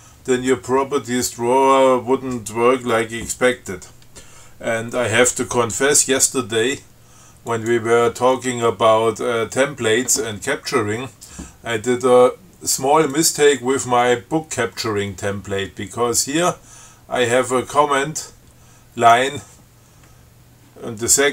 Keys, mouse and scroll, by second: 7.7 click, 13.4 click, 16.7-19.6 drag.